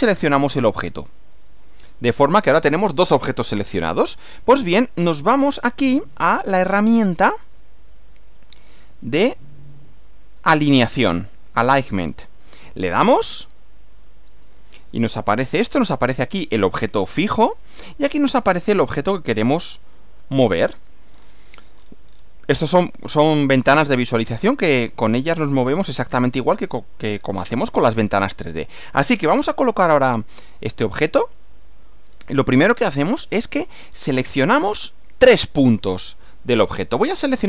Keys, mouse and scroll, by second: 1.3 ctrl+click, 4.5 click, 5.6 click, 7.1 click, 8.7 click, 9.3 click, 12.5 click, 16.6-18.0 middle drag, 18.9 scroll down 1, 20.2-21.2 shift+middle drag, 21.2 shift+scroll down 1, 21.8-22.4 scroll down 2, 22.7-23.8 middle drag, 24.5 click, 25.7 scroll down 2, 26.1 scroll up 2, 26.6-27.7 middle drag, 30.4-32.1 middle drag, 32.1 scroll up 2, 32.9 shift+middle click, 34.2 scroll up 2.